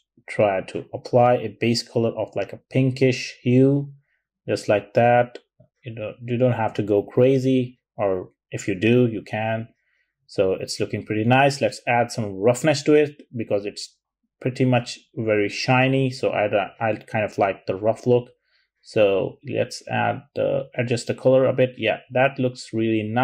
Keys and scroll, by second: 6.7 typing, 9.1-9.6 typing.